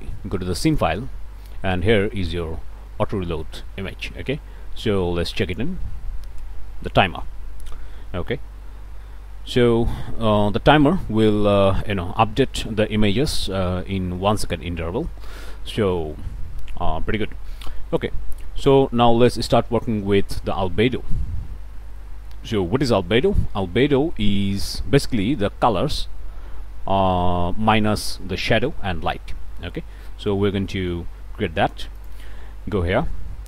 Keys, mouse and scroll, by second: 0.7 click, 5.4 click, 8.8 ctrl+s, 17.2 middle click, 17.4 scroll up 2, 17.7 middle click, 18.6 scroll up 1, 19.1 middle click, 20.2 click, 21.7-22.0 scroll up 2, 22.2 middle click, 23.8-24.3 scroll up 1, 24.6 middle click, 30.1 middle click, 30.7 click, 32.0 ctrl+shift+click.